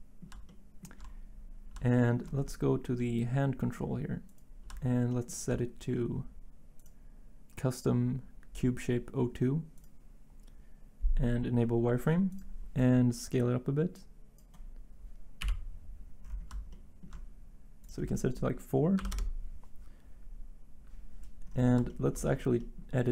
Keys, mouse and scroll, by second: 15.4 1, 18.9 4, 19.1 Return.